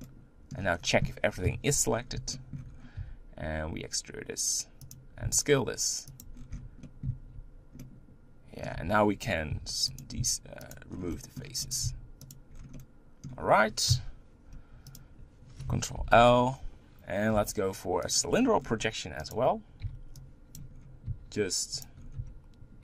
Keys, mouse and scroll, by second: 0.0 middle click, 0.7-1.4 scroll down 1, 1.4 KP_1, 1.9-2.3 scroll up 5, 2.3 shift+middle click, 2.7-3.0 scroll up 3, 3.0 e, 5.2 s, 6.3 scroll down 1, 6.5 Tab, 6.8 middle click, 7.1 z, 7.8 middle click, 8.8 Tab, 9.5 3, 10.0 click, 10.7 x, 10.9 scroll down 3, 11.1 middle click, 11.7 click, 11.8 x, 12.5 scroll down 3, 12.7-13.9 middle drag, 13.9 KP_1, 14.9 click, 15.9 ctrl+l, 18.2 u, 19.3 click, 20.6 b, 21.1 s, 22.2 g.